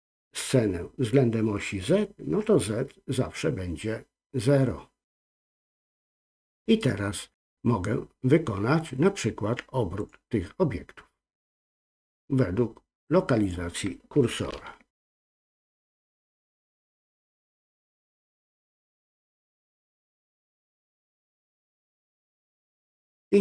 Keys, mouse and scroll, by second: 10.0 click, 11.9-13.5 drag, 14.5 ctrl+z, 16.5 shift+c, 18.8-23.4 drag.